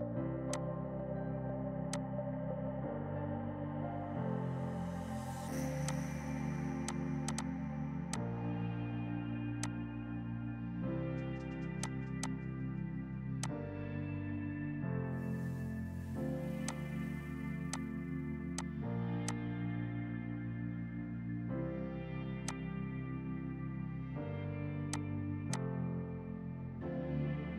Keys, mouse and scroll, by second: 0.6 alt+click, 1.9 click, 5.9 click, 6.9 click, 8.9 typing, 11.8 click, 14.4 space, 16.7 click, 20.0 space, 22.5 click, 23.8 Page_Up, 24.9 click, 25.5 shift+click, 26.5 right click.